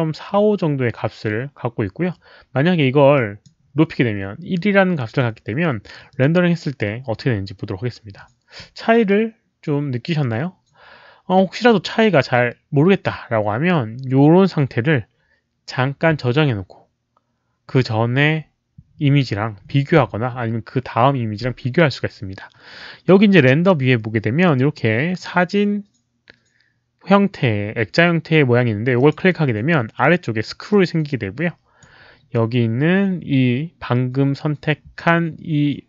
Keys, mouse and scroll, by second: 3.1 click, 6.0 click, 11.3-11.6 drag, 20.0 click, 28.9 click, 30.6-31.7 drag.